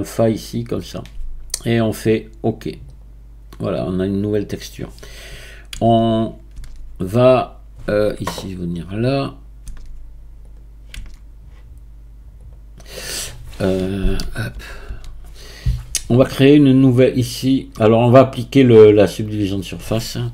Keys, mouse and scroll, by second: 5.7 Tab, 6.6 Tab, 9.8 Tab, 10.4 click, 10.9 Tab, 12.4-14.2 drag, 14.2 a, 14.5 a, 14.9 a, 18.9-20.3 drag.